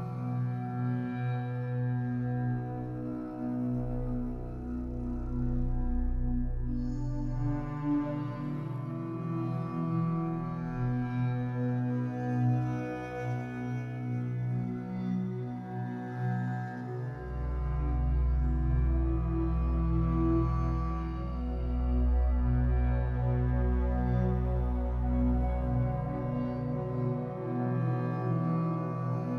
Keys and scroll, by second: 0.3 3, 4.0 Escape, 8.6 ctrl+c, 9.9 Delete, 10.7 ctrl+v, 14.3 b, 17.6 b, 19.6 Escape, 20.0 3, 22.5 Escape, 23.9 l, 26.0 b, 29.1 Escape.